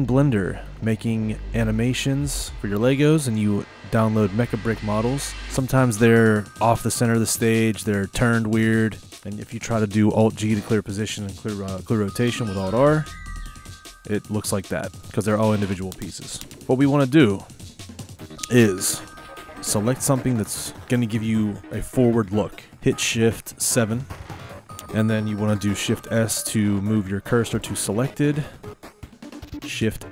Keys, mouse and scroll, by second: 5.4 click, 6.0 click, 6.5-11.9 middle drag, 13.0 alt+g, 13.4 alt+r, 14.3-16.5 middle drag, 16.6-18.5 shift+middle drag, 16.6 z, 18.5 click, 19.8 click, 20.7-22.2 middle drag, 23.9 shift+KP_7, 24.8-26.2 shift+middle drag, 26.2 shift+s, 27.7 shift+s, 30.0 shift+a.